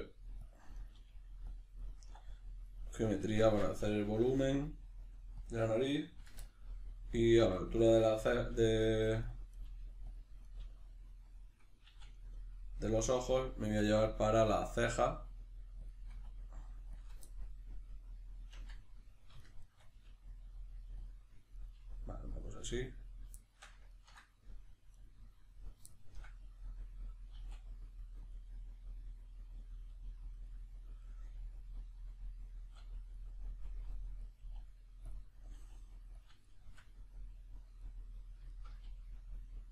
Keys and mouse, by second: 0.5 click, 0.8 right click, 0.9 g, 1.5 click, 1.8 right click, 2.0 e, 2.7 right click, 3.4 ctrl+z, 5.5 click, 6.4-9.3 ctrl+middle drag, 8.5 g, 9.3 click, 9.5 right click, 9.6 g, 10.2 click, 10.4 right click, 10.6 g, 11.4 click, 11.9 e, 13.0 click, 13.6 e, 15.9 click, 16.1 e, 17.1 click, 17.3-19.4 ctrl+middle drag, 19.4 shift+right click, 19.6 shift+right click, 20.0 g, 21.1 click, 21.5 right click, 21.7 g, 22.5 click, 22.7 right click, 23.4-24.9 shift+middle drag, 24.9 right click, 25.9-28.3 shift+middle drag, 27.3 e, 28.3 click, 28.6-30.3 middle drag, 29.9 g, 30.3 click, 30.5-33.2 middle drag, 32.6 e, 33.2 click, 33.7 e, 34.3 click, 34.4 e, 35.1 click, 35.5 e, 36.2 click, 36.4-39.7 shift+middle drag, 38.8 g.